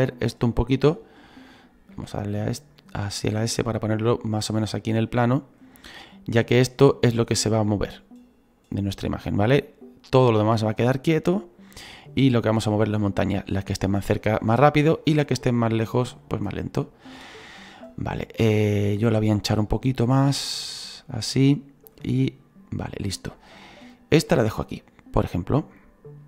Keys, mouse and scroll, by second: 1.9 s, 3.0-4.5 middle drag, 4.5-5.8 drag, 5.8-6.8 middle drag, 6.8-14.6 drag, 17.0-17.6 scroll up 1, 17.7 scroll up 1, 19.0-26.2 drag.